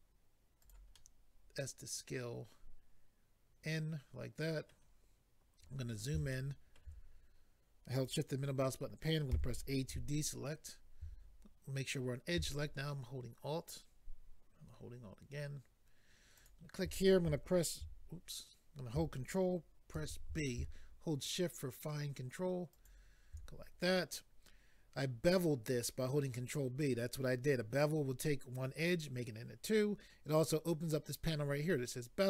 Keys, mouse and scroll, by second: 0.6 click, 0.9 middle click, 5.7-6.1 scroll up 3, 6.3 shift+middle click, 7.0-7.4 scroll up 2, 9.3 a, 16.4 alt+click, 19.9 ctrl+b, 22.7 shift+click.